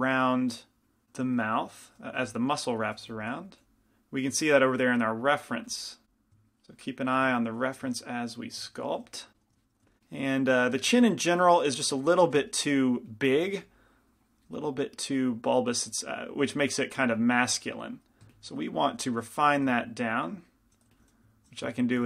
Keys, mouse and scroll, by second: 0.7 click, 2.2 f, 3.2 f, 3.2 g, 3.7 f, 4.8-7.6 drag, 5.8 f, 9.9 i, 9.9 f, 10.7 f, 11.2-22.0 drag, 12.5 f, 12.5 i, 14.8-19.2 middle drag, 19.2 shift+f, 21.1 f.